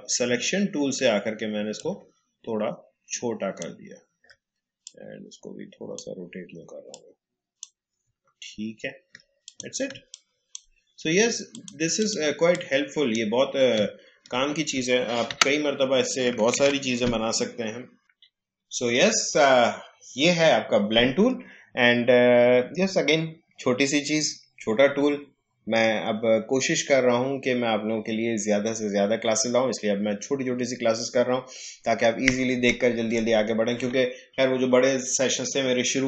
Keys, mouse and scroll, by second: 0.4 alt+scroll up 1, 1.7-4.8 drag, 4.8-8.2 drag, 8.2-9.1 alt+scroll down 1, 9.4 click, 11.5-13.8 drag, 13.8-14.2 alt+scroll down 1, 15.2 Delete, 16.5 ctrl+z.